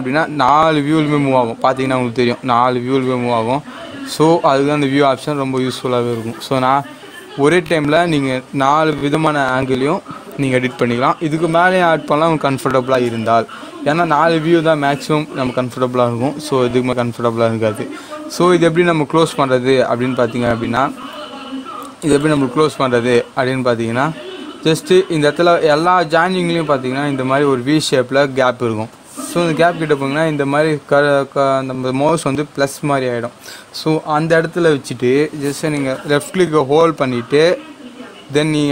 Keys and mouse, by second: 5.6 click, 22.1 right click, 35.7-38.7 drag.